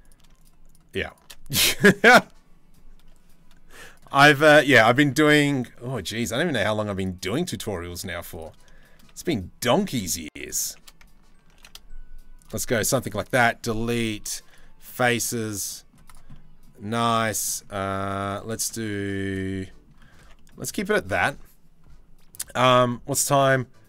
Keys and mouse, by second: 1.7 Delete, 4.3 click, 4.9 ctrl+r, 7.7 ctrl+r, 8.4 shift+middle click, 11.1 ctrl+b, 12.6 Delete, 14.5 click, 15.1 Tab, 15.3 click, 15.9 middle click, 16.4 Tab, 16.7 middle click, 17.5 middle click, 17.7 middle click, 18.0 shift+middle click, 18.3 click, 18.8 shift+click, 19.0 click, 19.9 Tab, 19.9 click, 20.8 ctrl+s.